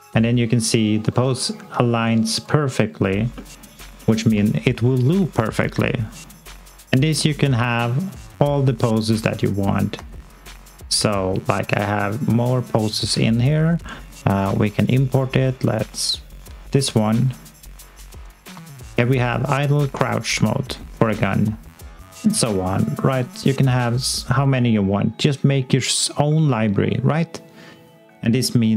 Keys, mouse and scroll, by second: 1.4 click, 1.4 scroll up 1, 1.9 alt+middle click, 2.4 alt+click, 3.3 alt+middle click, 6.1 middle click, 6.2 scroll down 1, 6.7 alt+click, 7.1 alt+middle click, 8.9 middle click, 10.5 middle click, 16.9 alt+click, 17.9 alt+middle click, 18.4 scroll up 1, 18.7 alt+click, 22.7 click.